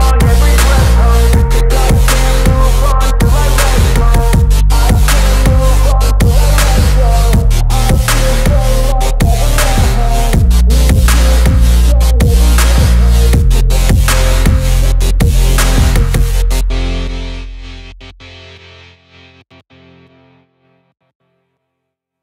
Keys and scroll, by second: 6.3 shift+Page_Down, 7.3 ctrl+z, 15.6 F3, 19.2 shift+F2, 20.3 F9.